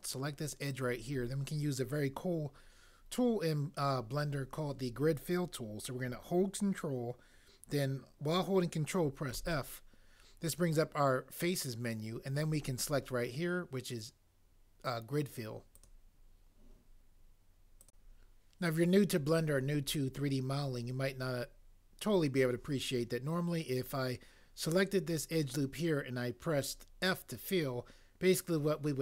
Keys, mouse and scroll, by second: 9.3 ctrl+f.